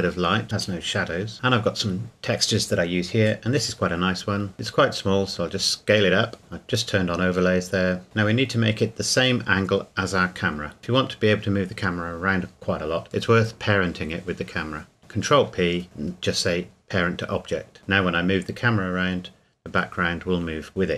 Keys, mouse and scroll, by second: 2.6 click, 4.5 click, 5.1 s, 6.4 click, 7.5 g, 8.0 middle click, 8.4 KP_7, 9.1 scroll up 1, 10.2 r, 10.8 click, 11.8 r, 12.8 click, 14.1 g, 15.0 ctrl+p, 16.5 click, 18.8 r, 20.4 Escape.